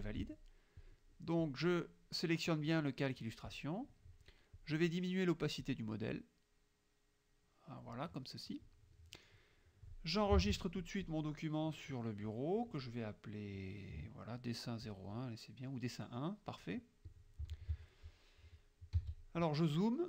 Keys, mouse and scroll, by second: 0.8 click, 1.5 click, 3.7 middle click, 4.6 click, 5.7-8.1 drag, 8.3 middle click, 9.0 middle click, 10.5 ctrl+s, 15.0 click, 16.3 click, 17.1 click, 17.6 ctrl+s, 19.0 z.